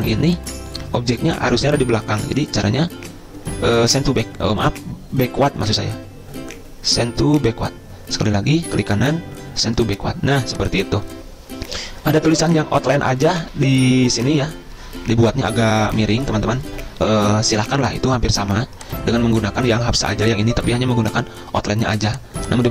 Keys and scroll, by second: 4.9 ctrl+z.